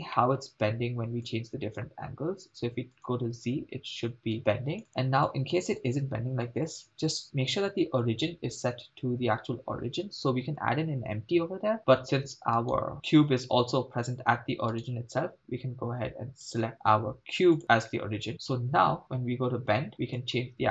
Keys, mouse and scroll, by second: 0.2 middle click, 1.3 click, 3.0 click, 4.4 click, 4.9 click, 12.8 right click, 14.9 right click, 16.5 click, 18.3 middle click, 20.2 click.